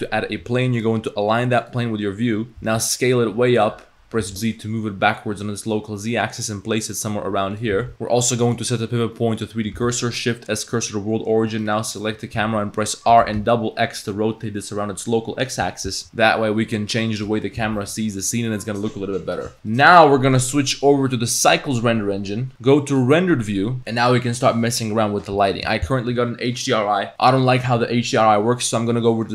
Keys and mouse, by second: 0.9-1.8 drag, 2.6 s, 4.2 g, 7.8 g, 7.9 s, 8.4-9.5 drag, 9.8 shift+s, 11.5 click, 12.0 click, 12.4 r, 17.6 g, 19.7 click, 20.8-21.6 drag.